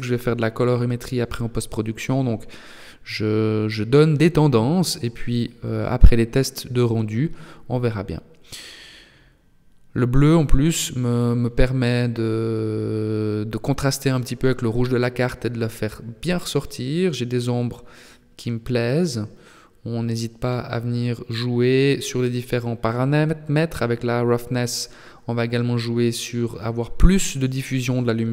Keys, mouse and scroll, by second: 9.8 click, 16.6 click, 24.8 click.